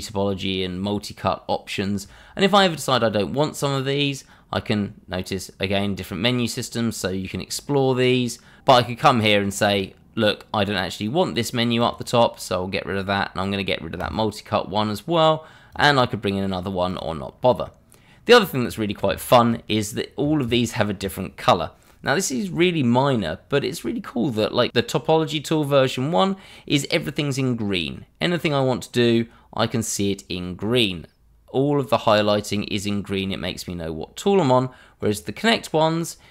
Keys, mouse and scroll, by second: 2.9 click, 9.7 click, 14.0 click, 18.5 scroll up 1, 19.2 shift+middle click, 19.2 middle click, 19.5 shift+middle click, 28.3 click, 35.0 click.